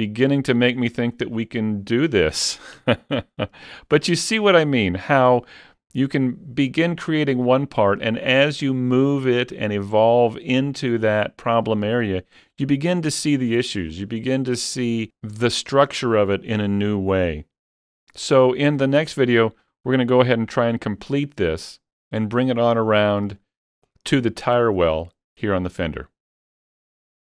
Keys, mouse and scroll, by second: 0.0 scroll up 3, 2.1 click, 2.8 Tab, 3.0-4.8 middle drag, 4.8 shift+middle click, 5.3-7.1 scroll up 2, 11.6 scroll up 1, 12.0 middle click, 12.9 middle click, 13.9 middle click, 14.2 scroll up 1, 23.1 middle click, 23.1 scroll up 1, 23.2 scroll down 1, 23.4-26.2 shift+middle drag.